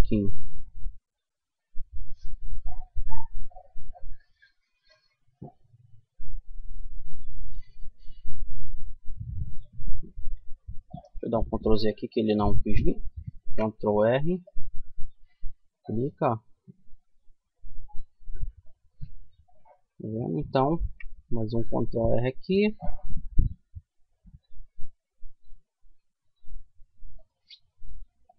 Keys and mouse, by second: 10.5 ctrl+z, 12.5 ctrl+r, 19.9 ctrl+r, 26.8-28.3 middle drag.